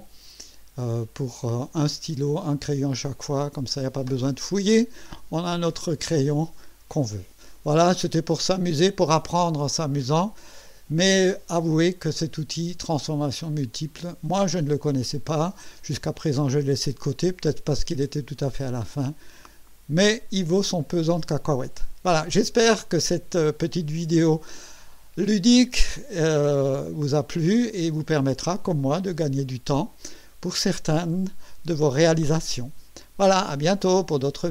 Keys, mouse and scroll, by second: 1.7-2.8 drag, 6.2-7.7 drag, 8.1 scroll up 1, 9.7-11.2 drag, 11.8 right click.